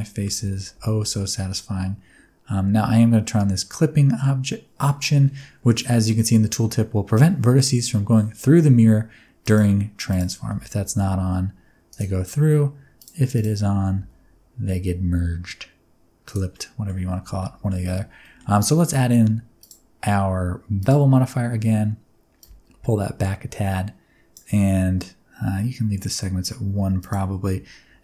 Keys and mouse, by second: 0.0-0.7 typing, 9.4 click, 10.0 click, 10.4 a, 10.8 g, 11.8 click, 12.9 click, 13.3 click, 16.2 click, 16.5 middle click, 17.1 Tab, 17.3 middle click, 18.1 middle click, 19.5-20.8 drag, 22.4-24.3 shift+drag, 27.0-28.0 drag.